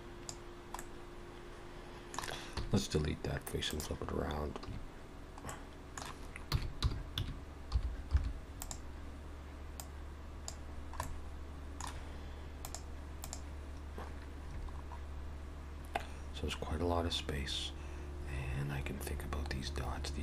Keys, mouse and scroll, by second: 0.8 middle click, 2.6 x, 4.7 a, 5.5 middle click, 6.5 r, 9.8 click, 10.7-11.9 scroll down 4, 11.1 middle click.